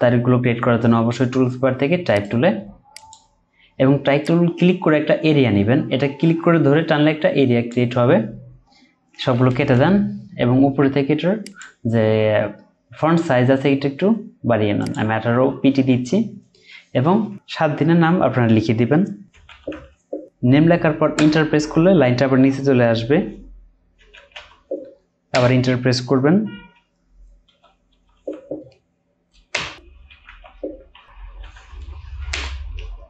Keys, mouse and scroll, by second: 2.1 right click, 9.6 BackSpace, 19.5 typing, 21.1 Return, 24.0-24.3 typing, 25.3 Return, 27.4-28.1 typing, 29.5 Return, 30.1 typing, 31.4 typing, 32.3 Return.